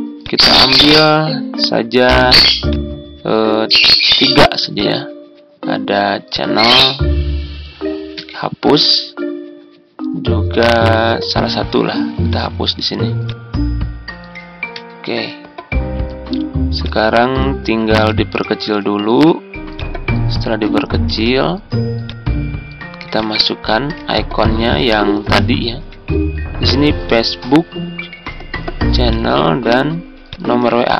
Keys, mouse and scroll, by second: 8.0 BackSpace, 14.6 BackSpace, 17.7 BackSpace.